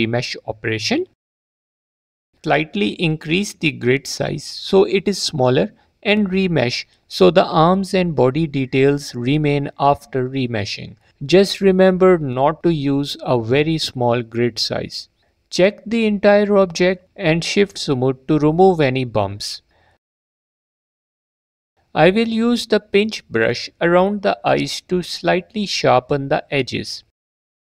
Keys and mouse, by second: 0.9 ctrl+z, 1.2 ctrl+z, 1.4 ctrl+z, 1.6 ctrl+z, 2.3 shift+r, 4.3 middle click, 5.4 ctrl+r, 6.4 shift+middle click, 6.7 shift+middle click, 8.1 shift+middle click, 9.1 shift+middle click, 11.3 shift+middle click, 11.6 alt+middle click, 12.0 shift+middle click, 14.3 shift+click, 15.5 middle click, 16.9 shift+click, 19.0 F4, 19.6 F4, 21.6 middle click, 23.7 click, 24.2 f, 24.7 f, 24.9 click, 26.0 click.